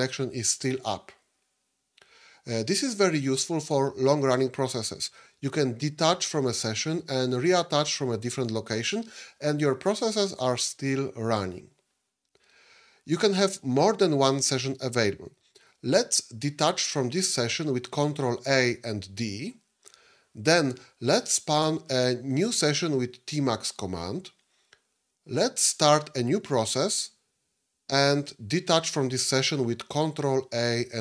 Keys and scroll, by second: 18.2 ctrl+a, 19.1 d, 29.9 ctrl+a.